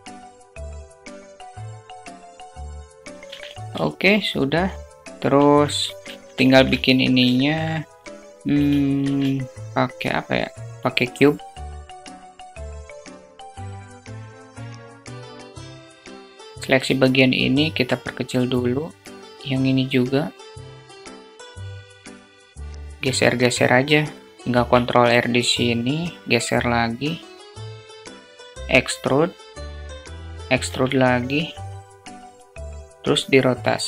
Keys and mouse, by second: 0.5 alt+shift+middle click, 0.8 s, 1.8 click, 2.2 click, 3.2-4.4 alt+shift+middle drag, 5.1 shift+a, 6.7 alt+shift+middle click, 8.4 shift+a, 11.8 click, 12.3 alt+z, 15.6 Tab, 24.3 ctrl+r, 28.1 e, 29.9 e.